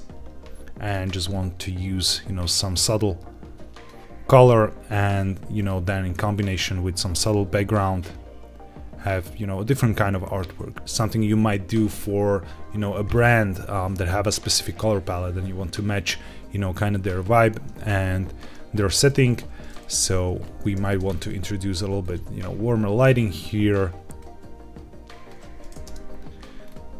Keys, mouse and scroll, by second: 0.7 click, 4.2 click, 4.9 click, 18.1-19.2 scroll down 2, 19.2 click, 19.6 middle click, 20.3 scroll down 1, 20.7 shift+d, 21.0 shift+z, 21.9 click, 22.1 g, 22.2 z, 22.9 click, 23.6 click, 25.7 KP_0, 26.5 scroll up 1.